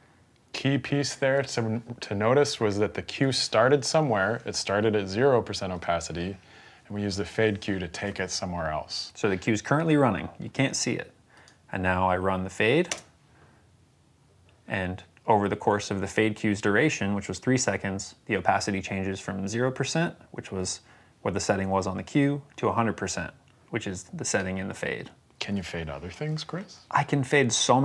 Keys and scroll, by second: 12.7 space.